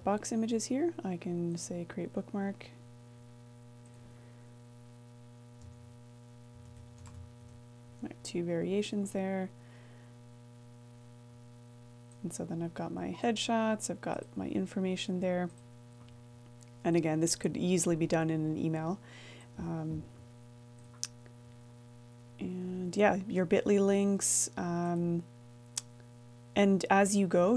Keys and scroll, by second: 0.0-1.0 typing, 8.4-10.7 typing, 22.3 BackSpace.